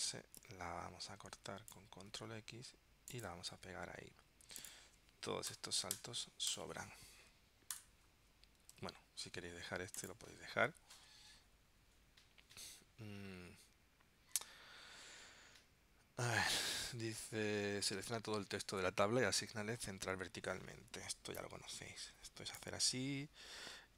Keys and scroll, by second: 2.3 super+x, 3.6 super+v, 8.9 super+z.